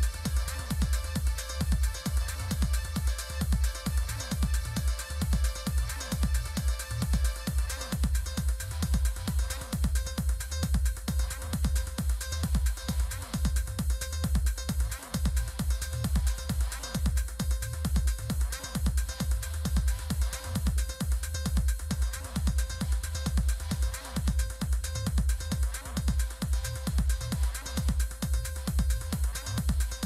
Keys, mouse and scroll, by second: 1.0 click, 6.5 click, 7.5 click, 9.2 click, 13.0 click, 16.7 click, 19.4 click, 21.5 click, 25.0 click, 28.7 Return.